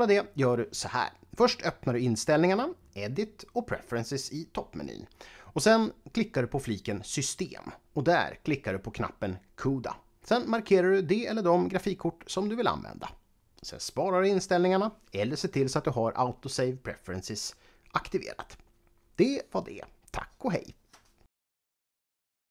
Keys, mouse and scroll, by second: 3.2 click, 6.4 click, 7.4 click, 15.1 click, 16.9 click, 19.8 click.